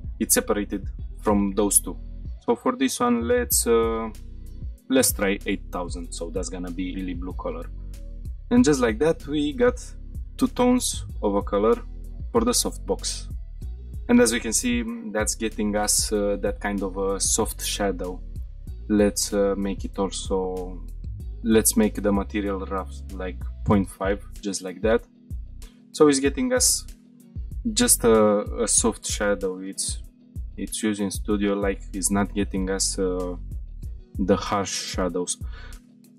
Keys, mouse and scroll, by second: 1.9-2.7 scroll down 2, 2.7-6.1 drag, 4.9 shift+0, 7.4-8.0 middle drag, 8.1 middle drag, 8.6 scroll up 1, 9.0-9.4 shift+middle drag, 9.6-10.3 middle drag, 10.6-11.0 shift+middle drag, 11.1-12.0 middle drag, 12.1-12.8 shift+middle drag, 18.2 click, 20.9 click, 21.5-23.6 drag, 24.9-25.4 middle drag, 25.4 scroll up 3, 31.4-31.9 scroll down 4, 32.2-32.7 middle drag, 32.9 scroll down 1, 34.1 click, 35.8-36.1 middle drag.